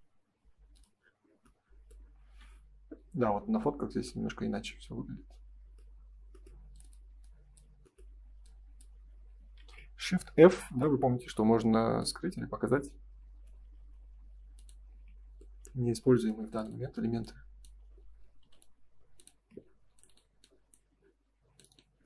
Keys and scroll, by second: 1.2 space, 2.2 ctrl+s, 9.5 shift+f, 14.8 space, 15.0 Escape, 19.3 space, 19.4 Escape.